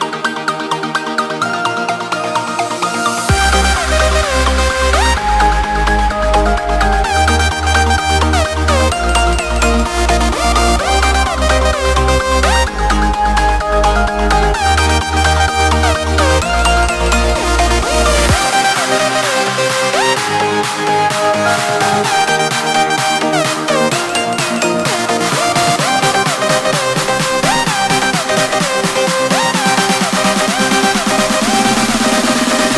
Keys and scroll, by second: 7.4 ctrl+space, 9.4 ctrl+x, 11.4 ctrl+v, 13.8 ctrl+space, 17.5 ctrl+space, 20.4 ctrl+x, 22.1 ctrl+v, 30.8 ctrl+space, 32.5 ctrl+x.